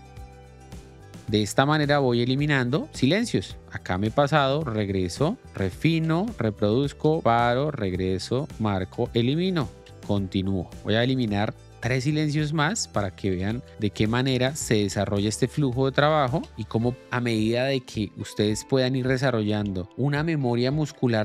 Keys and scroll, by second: 0.0-1.1 typing, 3.7 j, 5.1 k, 5.5 Left, 5.7 i, 5.9 l, 7.0 k, 7.5 Left, 8.2 o, 8.8 Delete, 9.7 l, 12.9-16.3 typing, 13.3 Left, 16.0 Delete, 18.8 k, 19.3 Right, 20.9 i.